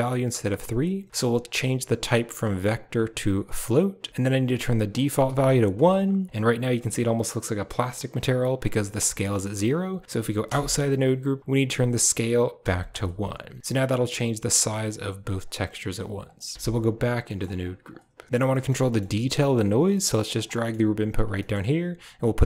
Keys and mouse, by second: 1.1-3.7 drag, 4.9 click, 9.3 middle click, 10.3 Tab, 11.7-12.8 drag, 13.6-15.2 drag, 16.2 click, 16.5 Tab, 18.4 middle click, 18.7 middle click, 19.2 click, 19.5 g, 20.4 middle click, 20.8 g, 21.2 middle click, 22.1-22.4 drag.